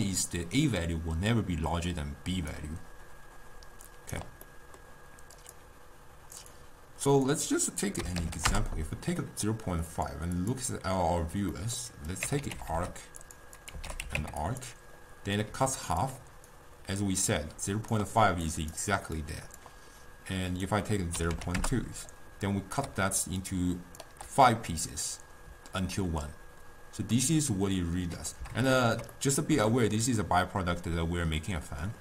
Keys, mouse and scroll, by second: 2.4 d, 2.6-4.5 right drag, 4.5-5.4 middle drag, 5.4-10.1 drag, 10.4 click, 11.6 middle click, 12.2-15.6 drag, 15.6 d, 15.8 click, 16.1-16.5 d, 16.6-18.1 right drag, 18.1-19.2 d, 18.6 right click, 18.9 d, 19.3 click, 19.6 d, 20.6-23.0 drag, 23.0 d, 23.4 d, 23.5 click, 24.1 d, 27.2-32.0 middle drag.